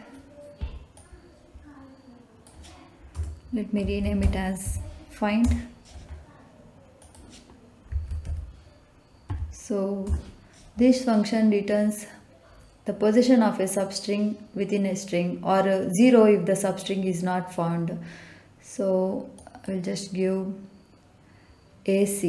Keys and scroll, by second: 3.0-4.6 typing, 5.4 Return, 7.8 f, 8.0 i, 8.2 n, 9.2 d, 10.0 Return.